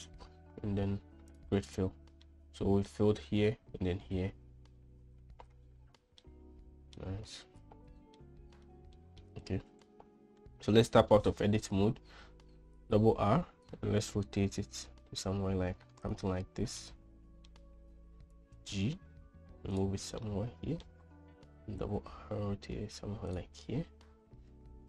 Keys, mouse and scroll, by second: 2.7 middle click, 6.7 middle click, 8.6 middle click, 9.4 shift+middle click, 10.4 Tab, 13.2 r, 17.2-17.9 middle drag, 19.0 g, 20.8 middle click, 22.3 r.